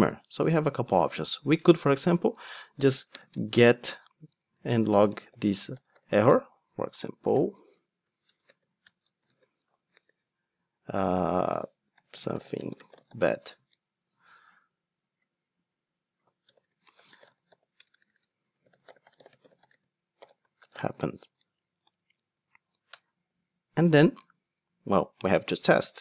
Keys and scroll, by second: 6.3 Return, 13.6 super+a.